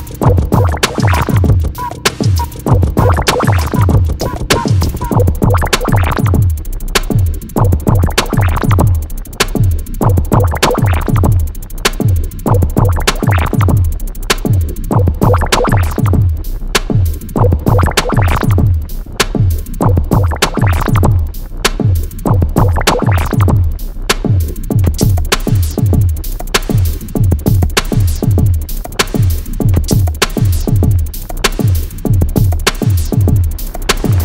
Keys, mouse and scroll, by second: 0.1 scroll up 1, 1.5 Escape, 1.9 middle click, 2.2 scroll up 1, 5.2 click, 10.1 Escape, 12.4-13.1 scroll up 1, 13.1-13.6 scroll down 1, 15.5 l, 15.6-16.1 scroll down 1, 16.1 x, 16.6 click, 17.7 Escape, 18.1 click, 18.3-20.7 typing, 19.5 click, 19.7-20.1 scroll up 1, 20.7 Return, 20.8 scroll up 1, 21.5 Escape, 22.2 Escape, 22.5 click, 26.1 middle click, 26.8 scroll down 1, 27.9 click, 30.5 Escape, 32.4 scroll, 33.8 l.